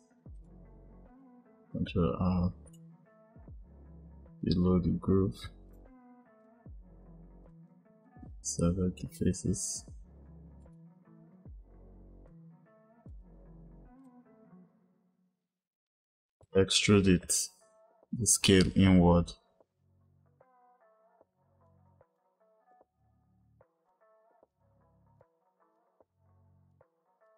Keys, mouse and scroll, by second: 2.3 ctrl+r, 6.3 click, 7.4 click, 10.5 click, 12.1 shift+click, 13.8 click, 16.3 e, 19.8 ctrl+z, 20.0 click, 22.1 click, 22.6 click, 23.1 ctrl+r, 24.8 ctrl+r, 26.2 click, 27.2 click.